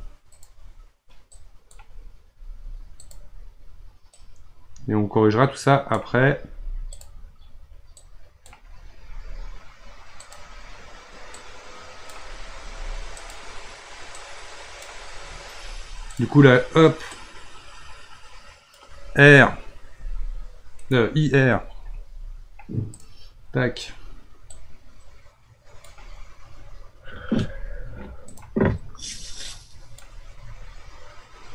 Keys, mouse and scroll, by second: 1.3-2.4 drag, 2.4 r, 4.1 click, 6.5 r, 8.0-9.0 drag, 9.0 r, 11.4-12.5 drag, 12.5 r, 14.2-15.6 drag, 15.6 r, 17.2-19.9 drag, 19.9 r, 24.5-27.3 drag, 27.3 r, 29.5-31.5 drag.